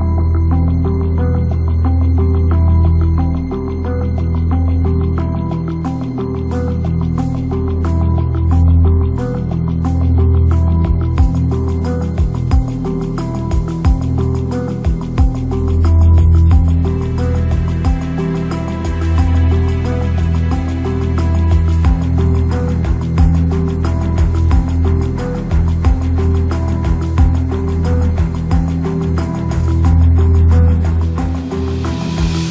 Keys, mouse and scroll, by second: 0.4 shift+a, 2.0 click, 4.7 shift+a, 6.4 click, 8.0 click, 9.6 shift+a, 11.7 g, 12.9 s, 13.7-16.1 drag, 18.1 click, 18.3 shift+a, 19.9 g, 23.4 s, 24.4 click, 25.1 ctrl+click, 25.8-27.6 ctrl+drag, 30.1 shift+a.